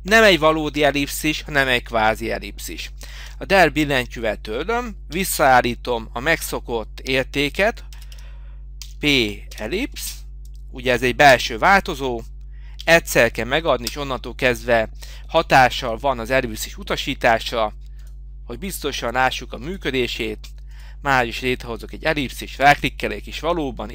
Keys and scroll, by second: 3.3 Delete.